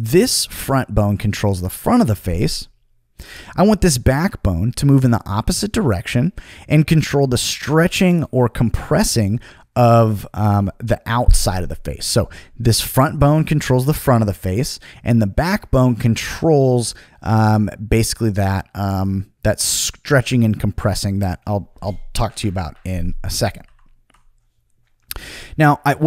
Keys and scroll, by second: 23.6 super+z.